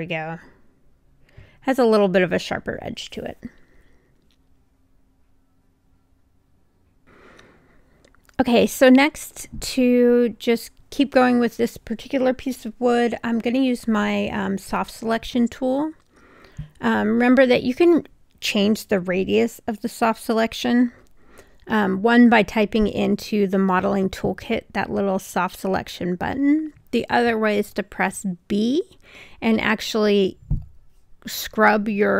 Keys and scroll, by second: 3.5 3, 11.8 b, 17.5 2, 17.8 Return, 19.3 b.